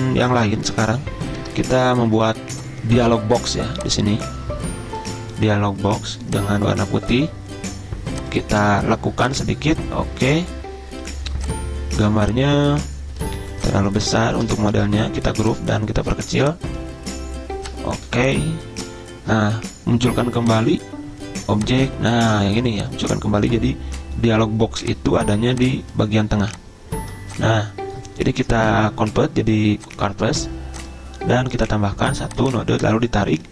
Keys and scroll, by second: 14.3 ctrl+z, 14.9 ctrl+g.